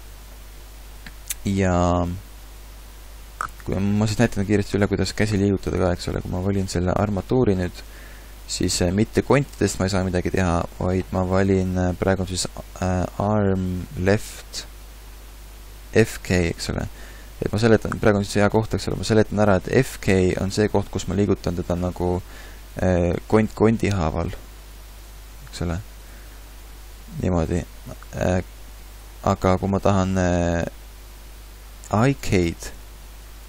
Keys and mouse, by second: 9.5 r, 19.1 r, 20.9 r, 23.7 r, 26.4 r, 28.3 g.